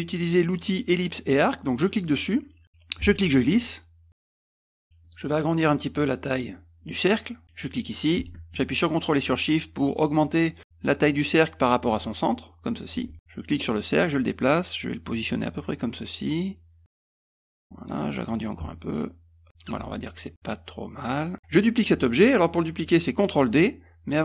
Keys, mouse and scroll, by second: 1.8 click, 3.0-4.4 ctrl+drag, 5.0 click, 7.5-12.9 drag, 13.5-17.9 drag, 18.8-19.7 ctrl+shift+drag, 20.9 click, 21.3 middle click.